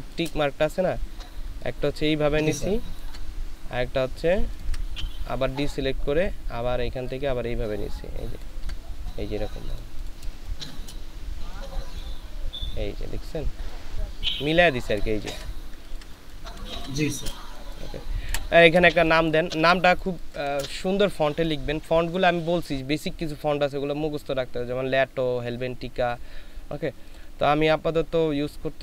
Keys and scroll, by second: 10.4 ctrl+space, 15.0 ctrl+space, 15.7 ctrl+space, 16.5 ctrl+space, 18.3 Delete, 18.9 space.